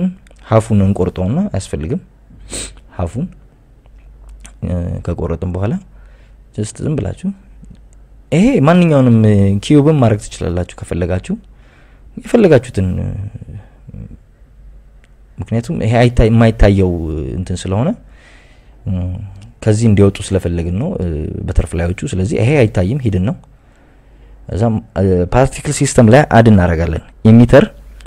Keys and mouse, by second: 0.4 KP_1, 0.9 Tab, 2.1 click, 2.6 KP_Add, 2.8 KP_Add, 3.8 click, 5.2 click, 5.8 x, 7.2 click, 8.3-9.7 drag, 9.8 click, 11.8 g, 12.4 Escape, 13.1 click, 13.7 g, 15.7 z, 16.4 click, 16.7 Tab, 17.7 Tab, 18.5 click, 19.0 shift+s, 20.8 Tab, 26.3 click, 27.1-28.0 drag.